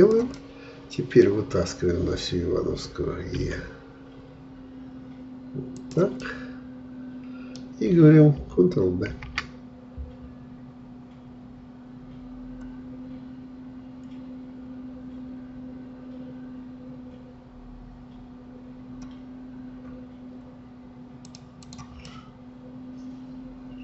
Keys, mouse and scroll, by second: 0.3-3.4 middle drag, 3.4 e, 6.3-9.1 middle drag, 9.1 ctrl+b, 21.6 click, 22.1-23.8 middle drag.